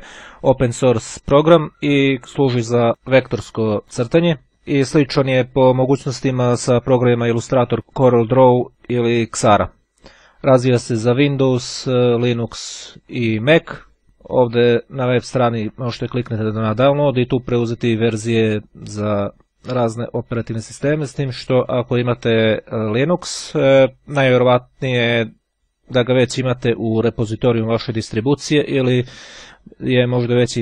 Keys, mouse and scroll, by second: 14.0 click.